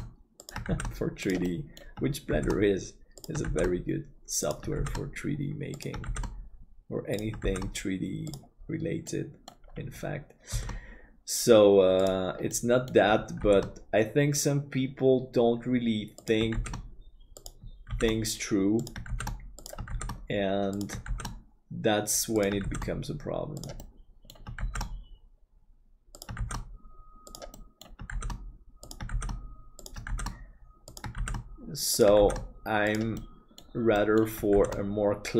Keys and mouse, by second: 1.5 middle click, 9.1 middle click, 10.5 shift+d, 12.5 middle click, 16.8 shift+d, 23.8 middle click, 27.5 middle click, 32.3 shift+d, 33.2 middle click, 34.0 middle click.